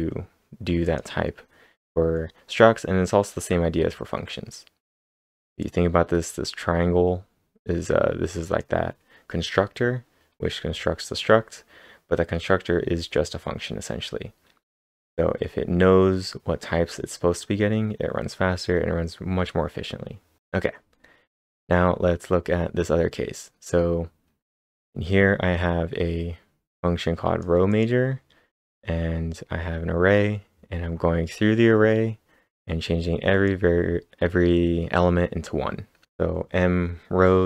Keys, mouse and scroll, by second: 0.8 click, 1.3 scroll up 2, 2.2 scroll up 4, 4.0 scroll down 2, 5.6-12.9 drag, 10.5-12.5 scroll up 3, 20.4 click, 20.4-20.8 scroll up 1, 20.9-23.3 scroll up 7, 26.7-30.1 drag, 26.7-27.1 scroll up 1, 33.3-35.8 drag, 33.3-35.4 scroll up 1.